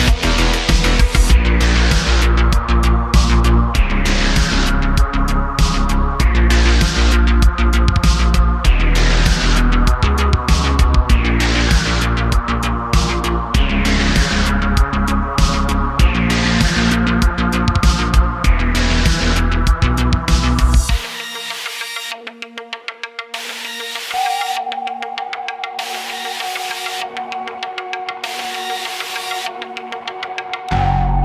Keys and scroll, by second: 0.1 x, 0.7 x, 1.5 x, 2.7 x, 4.2 2, 5.8 0, 6.0 s, 6.3 0, 6.4 Return, 7.3 f, 8.2 Tab, 8.7 /, 9.3 /, 12.3 /, 13.2 Tab, 13.8 3, 16.2 Tab, 17.1 q, 18.8 Tab, 19.5 /, 28.9 shift+a, 29.9 ., 30.5 s.